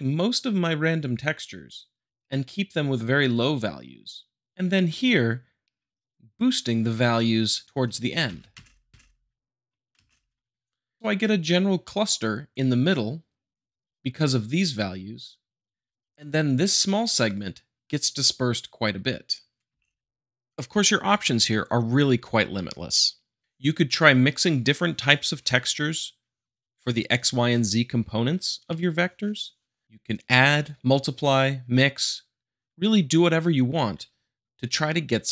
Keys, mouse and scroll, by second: 3.3-4.3 drag, 8.3 shift+Left, 8.5 space, 19.7 space, 28.7-29.7 middle drag.